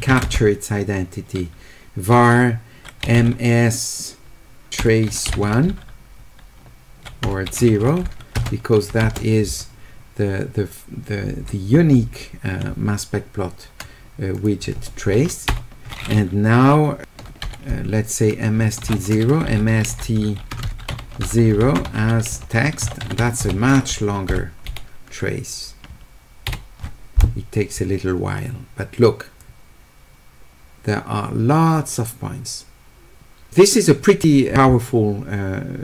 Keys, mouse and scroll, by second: 0.0 q, 0.2 space, 3.2 s, 8.4 space, 9.0 space, 14.3 click, 19.5 s, 21.6-22.8 typing, 29.4-33.5 drag.